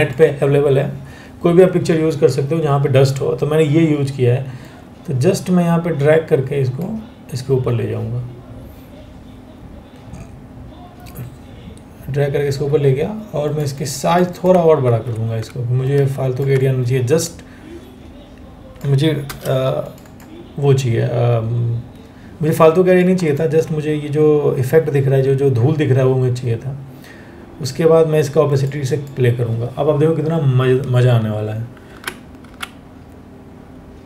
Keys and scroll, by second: 14.5 ctrl+t, 18.9 Return, 20.5 Return, 31.5 Down, 32.1 Down.